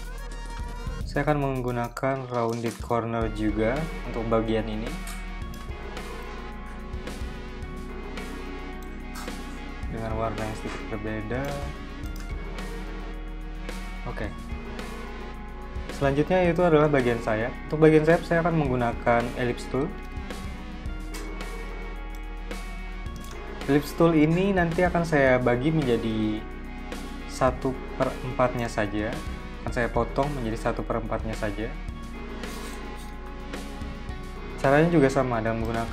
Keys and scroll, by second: 4.1 z, 4.8 v, 19.8-20.3 typing, 22.6 v, 34.2 m, 35.7 v.